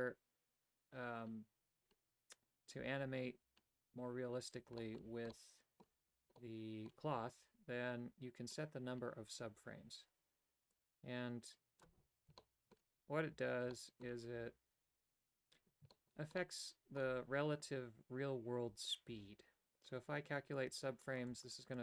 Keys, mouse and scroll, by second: 4.8 shift+middle click, 5.4 middle click, 6.4 middle click, 10.7-11.9 drag, 12.4 shift+middle click, 13.7 shift+middle click, 15.9 shift+middle click, 16.4 middle click, 20.5 click, 21.1 click, 21.3 click, 21.6 click.